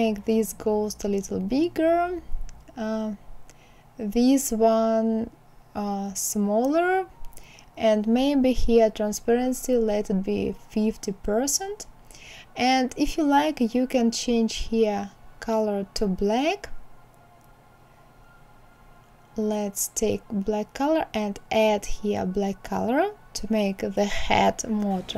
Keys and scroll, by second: 8.4 KP_5, 8.7 KP_0, 8.9 Return.